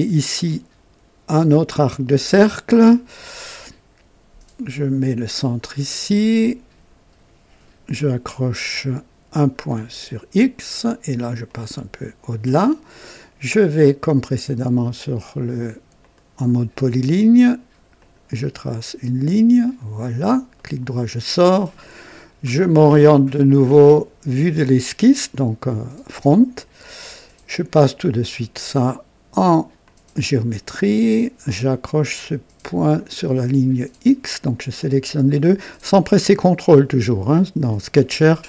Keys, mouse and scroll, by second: 5.3 click, 9.3 click, 11.4 click, 15.9 click, 17.9 click, 19.6 click, 20.5 right click, 24.5 click, 26.5 scroll up 1, 27.0 right click, 27.9 click, 29.8 click, 32.9 click, 34.7 click.